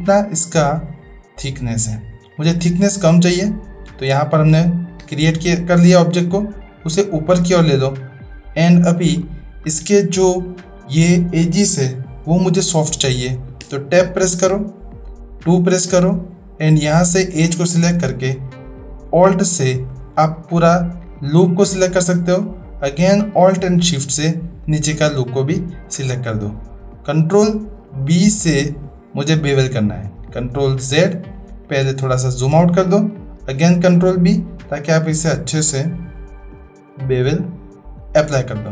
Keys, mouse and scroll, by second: 3.3-4.1 drag, 3.3-4.1 middle drag, 5.0 Tab, 6.8-7.9 drag, 13.7 Tab, 15.4 2, 16.1 click, 19.8 alt+click, 24.7 alt+shift+drag, 27.3 ctrl+b, 30.4 ctrl+z, 31.9-32.5 shift+drag, 33.4 ctrl+b.